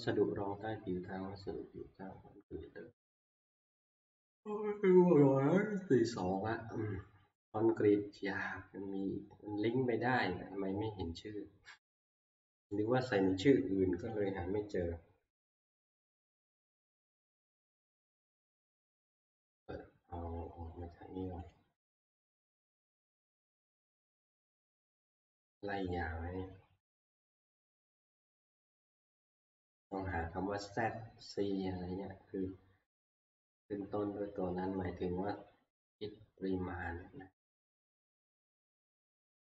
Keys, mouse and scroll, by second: 5.9 scroll, 8.1-10.0 scroll, 11.0 scroll, 13.4 middle click, 14.3 click, 21.5 click, 22.3 click, 25.5 click, 26.3-27.5 scroll, 28.1-28.4 scroll, 29.1 scroll, 30.6 scroll, 31.8 scroll, 33.3-34.1 scroll, 34.1-35.5 scroll down 16, 35.5 scroll down 1, 35.8-37.1 scroll up 13, 37.9 scroll up 2, 38.1-38.8 scroll.